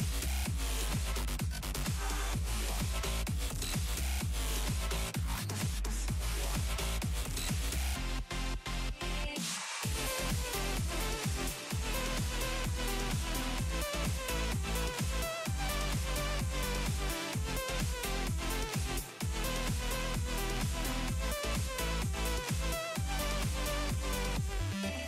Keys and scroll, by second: 13.7 s, 14.2 s, 14.7 s.